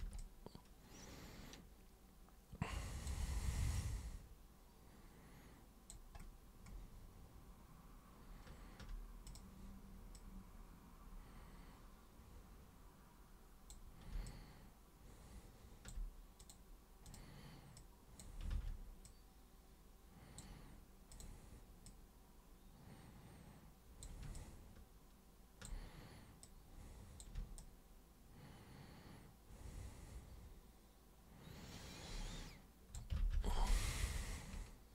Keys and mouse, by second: 0.1-3.0 alt+super+drag, 3.7-5.9 alt+super+drag, 9.2 super+click, 10.1-13.7 super+drag, 14.2-15.8 alt+super+drag, 16.4 super+click, 17.0 super+click, 17.7-18.2 super+drag, 19.0-20.3 super+drag, 21.1 super+click, 21.8-24.0 super+drag, 24.3-25.6 alt+super+drag, 26.4 super+click, 27.6-32.9 alt+super+drag, 33.3 ctrl+super+z, 33.5 ctrl+super+z.